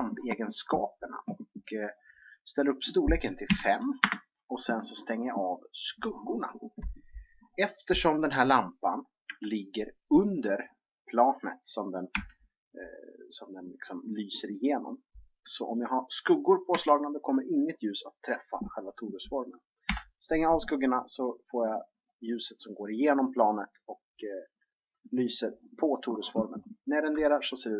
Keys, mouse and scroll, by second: 5.7-7.5 drag, 9.3 KP_3, 12.1 g, 16.7 KP_1, 19.9 KP_7.